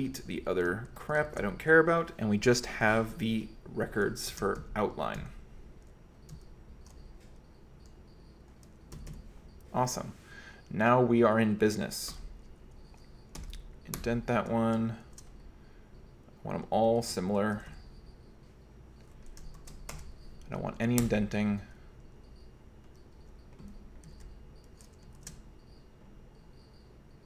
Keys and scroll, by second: 0.0-2.8 typing, 4.6 alt+j, 5.2 alt+j, 6.3 alt+j, 7.3-9.7 typing, 12.1 i, 13.4 Tab, 14.0 Escape, 15.1 shift+g, 17.0 ctrl+v, 17.6 g, 17.7 g, 19.7 shift+i, 21.1 Escape, 23.2 j, 24.2 ctrl+v, 25.2 shift+g, 27.1 h.